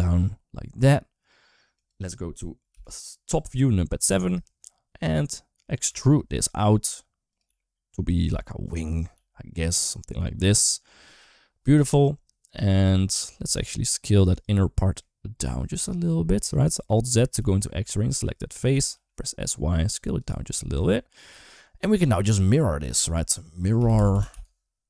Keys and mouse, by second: 2.5 KP_7, 3.6 shift+middle click, 5.7 e, 7.3 s, 8.1 e, 9.0 s, 11.7-12.9 middle drag, 13.5 alt+z, 14.5 middle click, 16.4 shift+middle click, 17.2 alt+z, 17.5 middle click, 18.5 s, 20.3 middle click, 20.6 Tab, 20.8 middle click, 22.1 click, 22.7-24.8 drag, 23.9 r.